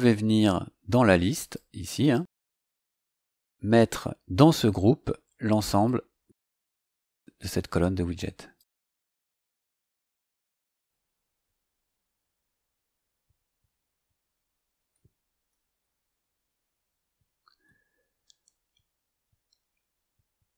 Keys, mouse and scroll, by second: 1.4 click, 2.0 click, 3.5 scroll down 2, 4.6 scroll down 2, 5.8-8.3 drag, 8.5-9.9 drag, 10.7-12.0 drag, 13.9 click, 15.9-17.7 drag, 19.4-20.5 drag.